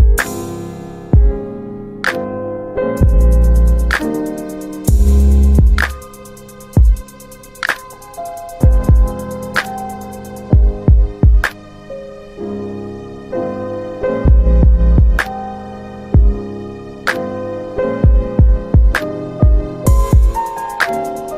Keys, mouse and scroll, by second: 0.3 middle click, 0.3 click, 0.9 middle click, 0.9-1.6 scroll down 2, 1.2 middle click, 1.9 click, 2.3 middle click, 2.3 click, 4.2 click, 4.3 middle click, 4.6 click, 5.8 alt+middle click, 6.2 click, 6.6 click, 8.4 alt+middle click, 9.1 middle click, 9.2 middle click, 9.2 scroll down 1, 9.6 alt+middle click, 10.0 click, 10.9 click, 12.6 alt+w, 13.3 alt+middle click, 15.6 click, 16.0 alt+middle click, 18.8 click.